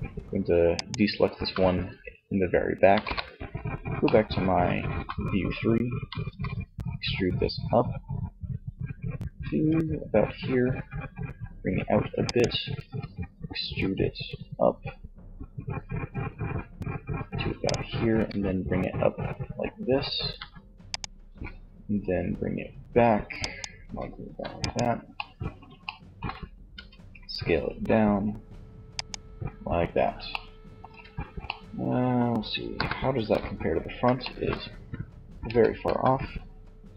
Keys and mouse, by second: 1.9 KP_3, 5.5 e, 11.7-13.4 drag, 12.1 e, 16.8-18.6 drag, 17.4 e, 20.3 click, 20.6 e, 21.9 click, 22.1 click, 22.9 e, 25.7 s, 29.1 middle click, 30.0 Tab, 31.8 KP_1, 32.2 Tab, 34.6 a, 35.1 a, 36.7 5.